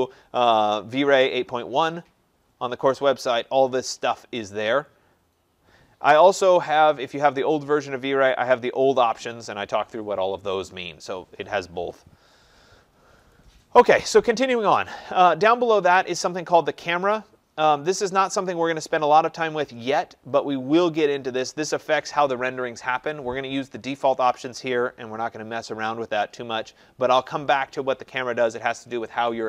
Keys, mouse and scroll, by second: 2.3-4.3 scroll, 4.4-5.8 scroll, 8.2-9.0 scroll, 10.6-13.2 scroll, 13.3 click, 16.1 click.